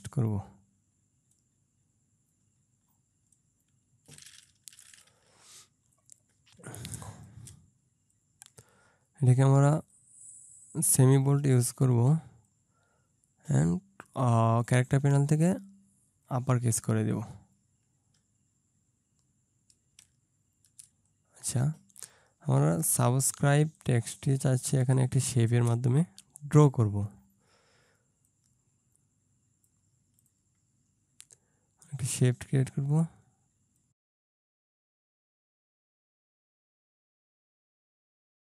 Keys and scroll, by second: 6.7 ctrl+space, 24.9 ctrl+space, 37.0 ctrl+z.